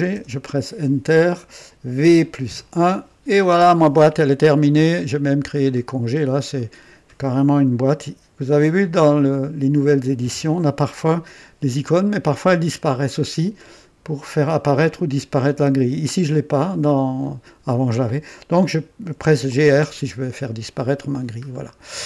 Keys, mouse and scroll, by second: 0.1 Return, 2.0-2.4 typing, 3.5 typing, 3.9-7.5 drag, 5.0-6.0 typing, 7.2-8.4 typing, 19.2-20.1 typing, 20.4-21.4 drag, 21.4 scroll down 1.